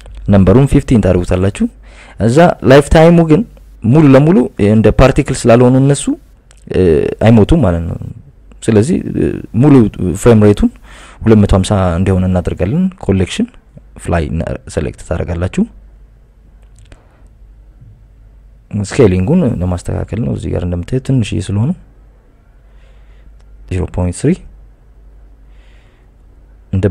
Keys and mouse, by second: 1.3 click, 2.7-4.2 drag, 4.9-5.8 drag, 7.3 click, 7.9-8.8 drag, 9.4 click, 11.8 click, 12.7 click, 13.2-14.6 drag, 15.2 click, 16.0-17.2 drag, 19.6 click, 20.0 click, 20.2 click, 21.9 click, 23.2-25.4 drag, 25.6-26.9 drag.